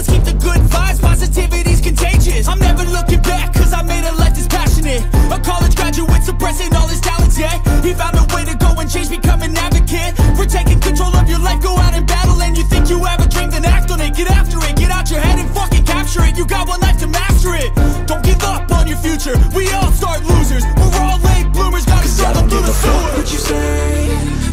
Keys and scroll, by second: 3.4 Down, 3.9-7.9 typing, 7.5 Up, 9.4 ctrl+t, 11.3 Return, 12.4 typing, 15.7 ctrl+t, 21.4 Return.